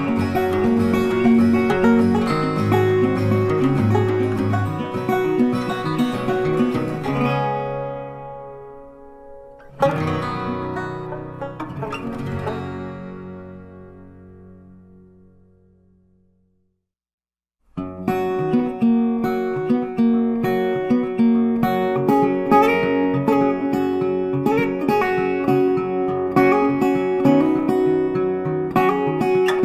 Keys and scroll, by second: 20.3 ctrl+t.